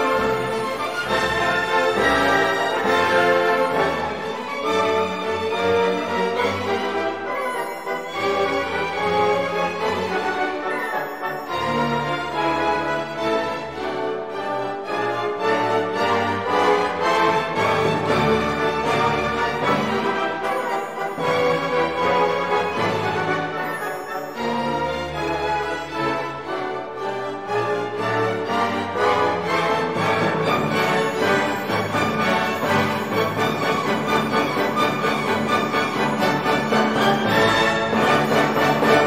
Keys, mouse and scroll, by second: 0.7 click, 2.0 4, 2.4 0, 3.1-3.6 scroll down 2, 4.1 click, 6.3 click, 8.1 click, 9.3 click, 11.1 1, 11.6 0, 12.7 click, 13.6 2, 14.1 0, 14.8 click, 15.6 click, 17.5 click, 18.7 2, 19.3 0, 20.2-22.5 drag, 22.9 click, 23.3 click, 23.9 click, 25.1-26.8 drag, 29.4-30.9 drag, 31.8-32.9 drag, 33.5-35.4 drag, 36.0-36.4 scroll down 1, 37.0 click, 37.3 click, 38.1-39.0 drag.